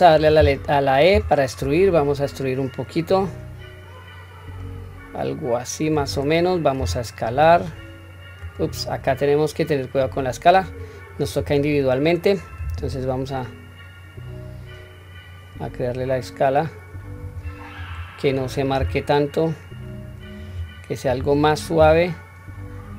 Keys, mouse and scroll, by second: 9.0-10.7 middle drag, 11.2 click, 12.7 s, 17.7 click, 18.8 s, 21.0 click, 21.8 s.